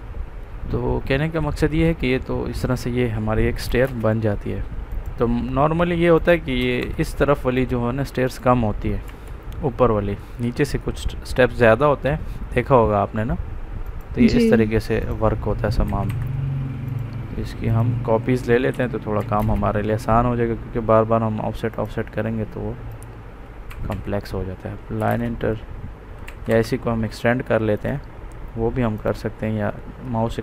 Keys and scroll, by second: 3.7 space, 6.5 Escape, 9.0 Delete, 15.8 Escape, 18.6 c, 19.3 space, 23.6 Escape, 24.9 space, 26.2 Escape.